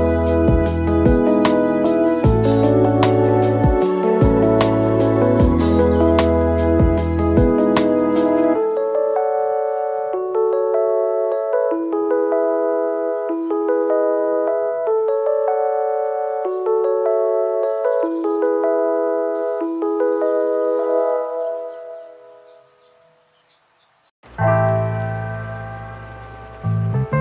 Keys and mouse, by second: 0.0 middle click, 0.3 middle click, 0.8 shift+e, 1.0 click, 1.6 click, 2.2 ctrl+z, 2.2 f, 2.7 z, 2.9 KP_Divide, 3.9-5.3 typing, 4.5 middle click, 4.9 click, 5.1 click, 5.3 shift+click, 5.5 shift+middle click, 5.7 click, 5.8 shift+click, 6.0 Tab, 6.3 Tab, 6.6 middle click, 6.7-15.5 typing, 7.2 ctrl+z, 7.3 shift+click, 7.4 middle click, 7.6 middle click, 8.3 click, 8.5 ctrl+z, 8.9 middle click, 9.2 middle click, 9.6 click, 9.9 middle click, 10.2 shift+middle click, 10.6 click, 10.7 middle click, 11.2 shift+middle click, 11.4 shift+middle click, 11.8 click, 12.1 ctrl+z, 12.3 shift+click, 12.5 shift+middle click, 13.0 shift+middle click, 13.2 shift+click, 13.5 shift+middle click, 14.0 click, 14.2 ctrl+z, 15.7 middle click, 15.9 ctrl+s, 16.3 middle click, 16.8 Tab, 16.9 click, 17.2-19.3 typing, 17.4 shift+middle click, 18.7 click, 19.4 middle click, 20.0 shift+middle click, 20.3-22.6 typing, 20.5 shift+middle click, 20.7 click, 20.8 middle click, 21.1 click, 22.6 shift+middle click, 22.9 ctrl+z, 23.1 shift+click, 23.3 shift+click, 24.7 ctrl+z, 25.0-27.2 typing, 25.2 click, 25.6 middle click, 26.1 middle click, 26.3 middle click, 26.7 KP_Divide, 26.9 click.